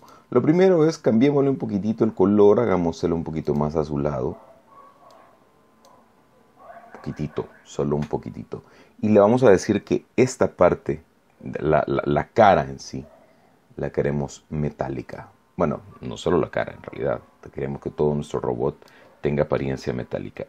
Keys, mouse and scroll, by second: 3.4 click, 5.0 click, 15.0-19.0 drag, 19.5-20.4 middle drag.